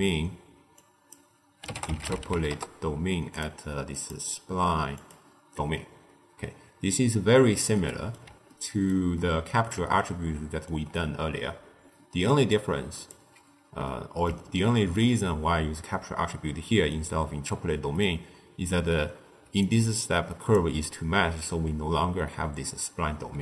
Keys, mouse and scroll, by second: 0.6 click, 3.9-6.9 drag, 7.6 scroll up 1, 7.6-12.4 middle drag, 12.4 click, 13.8-17.5 middle drag, 17.9-19.4 middle drag, 19.4 d, 19.6 click, 20.4 d, 20.6 d, 21.4 d.